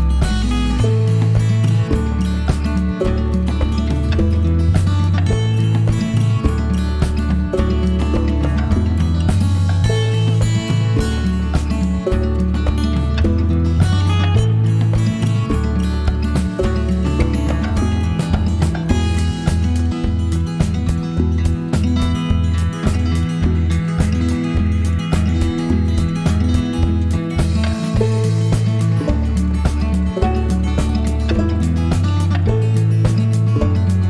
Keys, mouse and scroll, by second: 0.0 click, 0.6 click, 1.1 click, 1.8 click, 2.2 click, 2.6 click, 3.4 click, 4.4 right click, 6.0 click, 10.5 shift+click, 13.0 click, 15.0 click, 17.2 click, 20.3 click, 22.4 click, 23.8 click, 24.9 click, 25.6 click, 26.6 click, 30.1 click, 32.4 click, 32.9 right click.